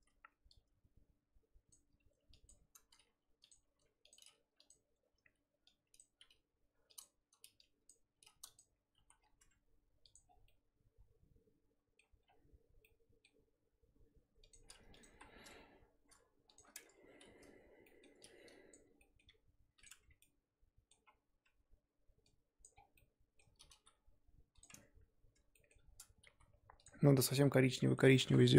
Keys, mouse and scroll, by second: 1.7 click, 2.5 ctrl+click, 3.1 g, 3.6 r, 4.1 g, 4.9-5.7 scroll up 3, 6.0 click, 6.2 g, 7.9 click, 8.1 g, 9.0 z, 9.2 scroll down 3, 9.4 Tab, 10.1 click, 10.2 scroll down 2, 10.4-12.0 middle drag, 12.0 scroll up 1, 12.2-12.8 scroll down 5, 12.8-14.5 middle drag, 14.5 click, 15.0 click, 15.1 KP_1, 16.5 shift+click, 16.8 Tab, 17.2 a, 18.7 click, 19.3 g, 19.9 Tab, 20.2 middle click, 21.1-21.4 scroll up 1, 21.4 Tab, 22.6 click, 23.7 g, 24.7 Tab, 25.3 Tab, 25.5 middle click, 26.3 s.